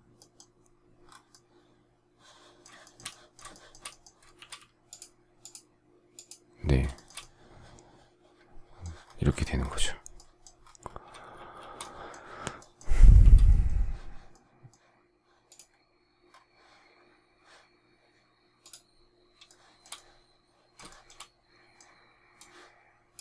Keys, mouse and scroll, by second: 2.8 shift+middle click, 3.4 shift+middle click, 4.3 shift+x, 6.9 shift+middle click, 11.3 shift+s, 13.1 shift+c, 19.4 shift+middle click, 19.9 shift+middle click.